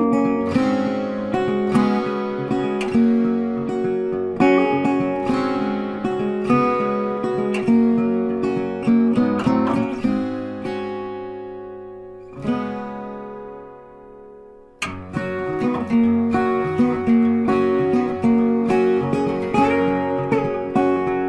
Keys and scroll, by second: 8.2 ctrl+t.